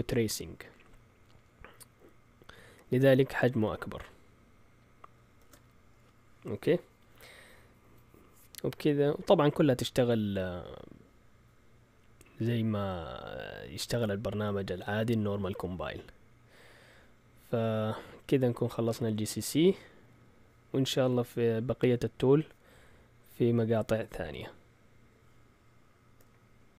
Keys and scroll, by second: 5.4 shift+super+z.